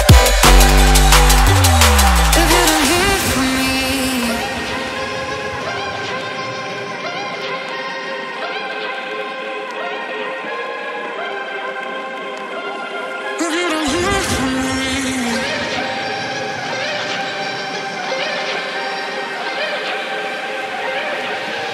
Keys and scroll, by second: 18.5-20.3 typing.